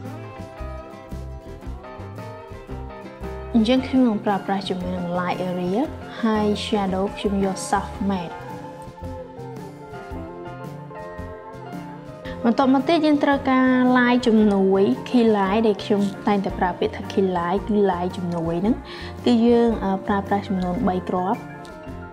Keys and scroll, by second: 18.5 Return, 21.9-22.1 typing.